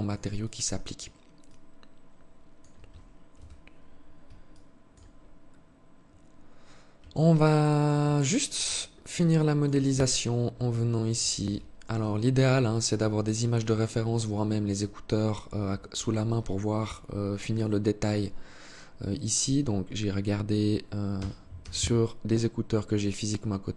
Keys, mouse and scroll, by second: 0.6 alt+click, 2.6 KP_3, 3.7 alt+shift+click, 4.4 scroll up 1, 6.4 alt+click, 7.4 alt+shift+click, 8.0-8.3 scroll up 4, 8.5 alt+shift+click, 9.1 Tab, 9.8 alt+click, 11.2 alt+right click, 12.5 alt+right click, 13.5 alt+shift+click, 15.6 alt+shift+click, 16.8-17.2 scroll up 1, 20.4 e.